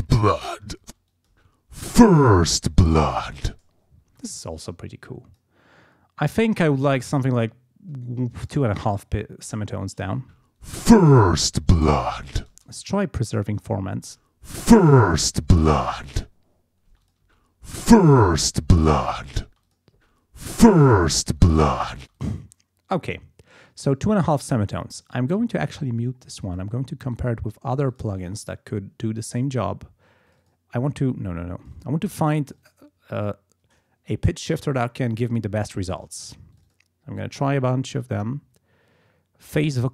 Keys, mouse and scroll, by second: 0.0 ctrl+scroll down 2, 0.8 ctrl+space, 1.1 ctrl+click, 1.6 ctrl+scroll up 2, 4.1 space, 5.1 click, 6.9-8.7 drag, 10.2 space, 12.5 space, 14.0 space, 16.9 space, 17.0 click, 18.3 click, 19.0 click, 19.5 space, 19.6 click, 22.0 space, 22.2 click, 25.0 click, 26.4 click, 27.0 right click, 27.9 click, 29.3 click, 30.3 click, 31.6 click, 32.5 click, 36.5 click.